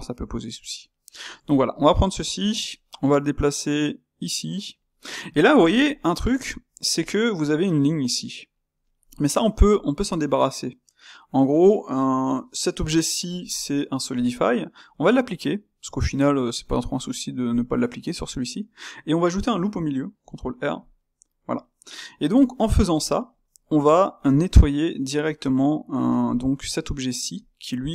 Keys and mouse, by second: 1.2 click, 1.4-2.6 shift+middle drag, 2.6 g, 5.0-17.6 middle drag, 17.6 space, 18.3 middle click, 19.1 Tab, 20.2 ctrl+r, 21.5 Tab, 21.8-27.9 middle drag.